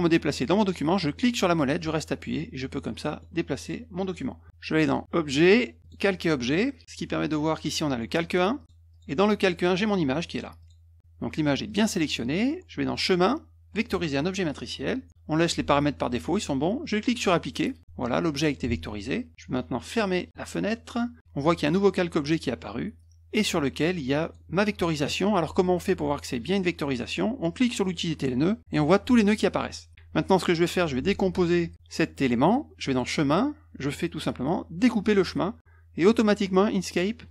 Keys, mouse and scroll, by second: 1.1-3.2 middle drag, 5.8 click, 8.5 click, 8.9 click, 9.4 click, 10.3 click, 10.6 click, 11.6 click, 12.8 click, 13.8 click, 17.1 click, 23.0-24.3 drag, 27.8 click, 32.8 click, 35.0 click.